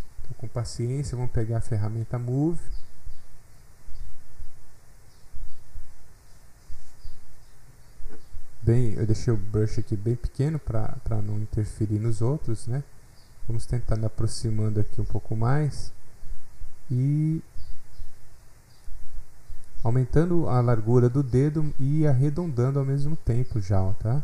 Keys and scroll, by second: 7.1 s.